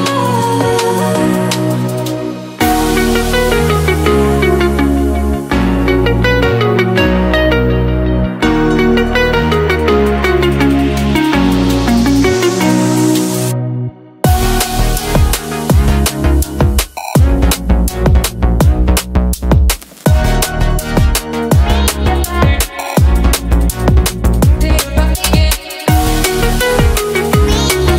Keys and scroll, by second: 0.0 Down, 2.1 o.